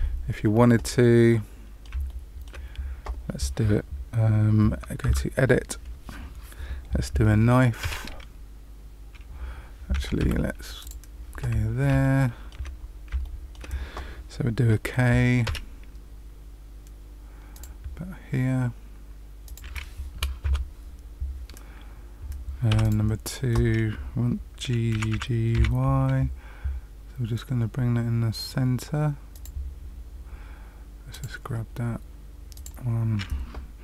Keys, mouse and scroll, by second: 1.2 middle click, 2.0 shift+middle click, 5.0 Tab, 7.8 k, 10.7 click, 11.5-12.0 scroll up 2, 12.0 shift+middle click, 12.7-13.2 scroll up 2, 13.2 shift+middle click, 15.4 k, 22.7 2, 22.8 click, 24.9 g, 31.0 click, 32.5 click.